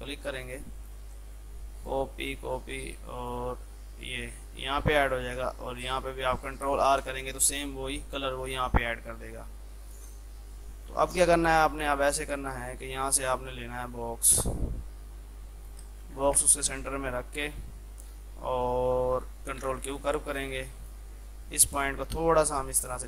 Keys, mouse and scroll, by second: 4.7 F3, 5.8 click, 7.0 ctrl+r, 8.6 click, 8.9 F2, 9.3-15.9 drag, 15.9 space, 16.3 shift+click, 16.5 c, 16.7 click, 19.5 ctrl+q, 19.8-23.0 drag.